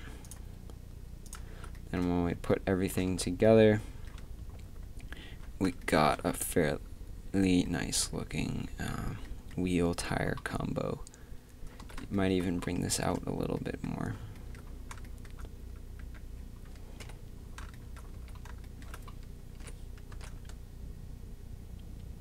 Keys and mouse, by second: 0.2-2.6 drag, 2.3 a, 3.6 shift+z, 12.0 shift+z, 12.9 Tab, 16.0 a, 17.0 KP_1, 18.1 z, 19.6 g.